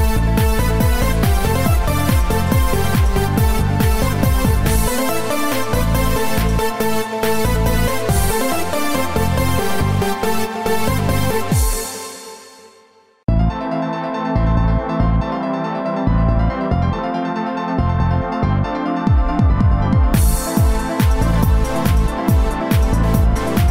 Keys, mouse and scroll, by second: 3.3 click, 9.2 click, 13.9 click, 15.3 click, 20.3-21.3 scroll down 5.